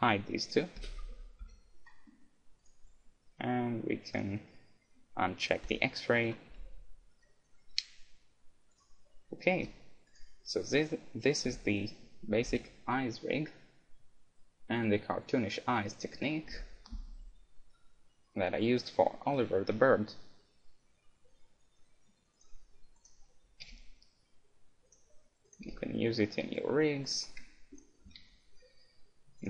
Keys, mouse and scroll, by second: 0.8 h, 1.4 KP_1, 1.9-3.9 middle drag, 2.7-4.3 right drag, 4.5-7.5 drag, 6.1-9.6 middle drag, 6.5 a, 6.7 KP_1, 8.8-10.4 right drag, 9.6 g, 10.6-12.5 right drag, 11.5 g, 22.5-24.7 right drag, 23.7 g, 25.5-29.4 right drag, 25.7 g, 27.3-29.0 middle drag, 28.0 g.